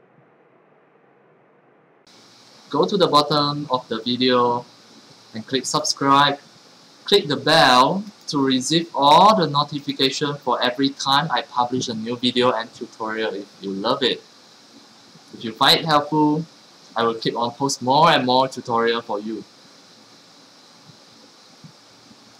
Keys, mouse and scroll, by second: 2.0 middle click, 2.6 middle click, 3.0 middle click, 3.9 middle click, 4.1 scroll down 1, 5.6 click, 8.0 click, 9.8 click, 22.3 click.